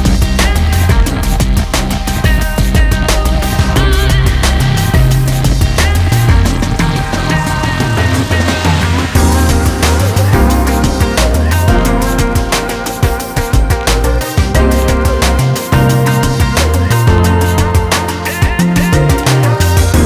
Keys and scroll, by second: 15.9-17.0 typing, 17.6 Return.